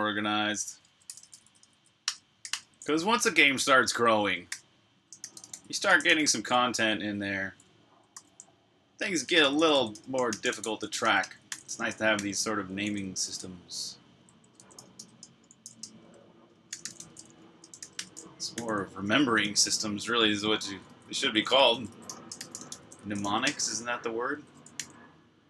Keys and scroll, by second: 0.6-2.2 typing, 4.3-6.4 typing, 8.0 super+k, 8.8-22.9 typing, 18.3 super+j, 24.6 super+j, 24.6 typing.